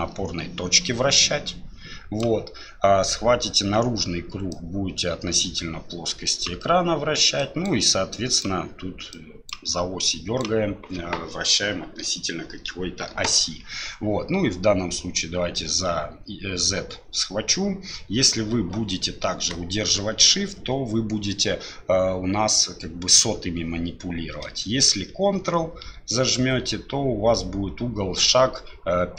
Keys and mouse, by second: 4.5-6.4 drag, 7.4 click, 8.1 click, 9.1 click, 10.1 click, 15.5-29.1 drag.